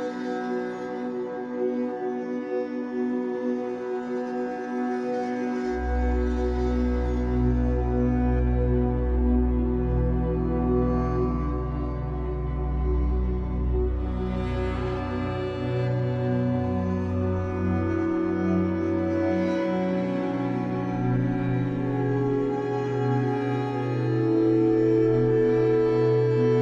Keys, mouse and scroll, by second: 0.8-10.5 middle drag, 4.0 scroll up 2, 10.5 click, 11.1-11.4 scroll up 1, 25.6-26.6 drag.